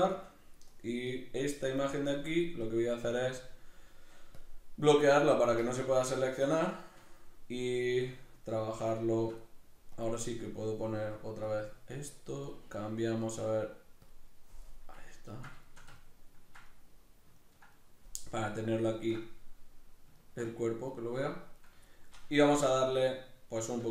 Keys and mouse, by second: 0.5 right click, 1.1 right click, 2.6-5.9 drag, 5.9 right click, 6.7 right click, 7.1-10.0 shift+middle drag, 10.0-14.7 drag, 14.7-21.6 middle drag, 21.6 right click, 21.8-23.9 shift+middle drag, 22.2 Tab.